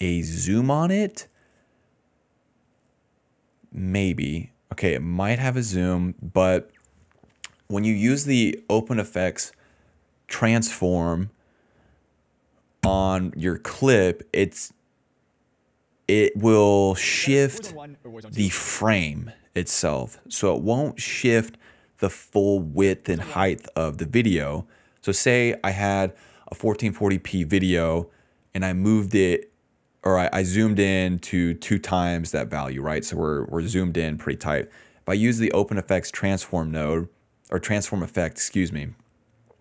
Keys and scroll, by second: 15.9 s, 16.8 ctrl+s, 17.0 space, 18.4 space, 19.8 d, 22.7 space, 23.3 space, 24.6-27.2 typing, 29.1 s, 29.2 s.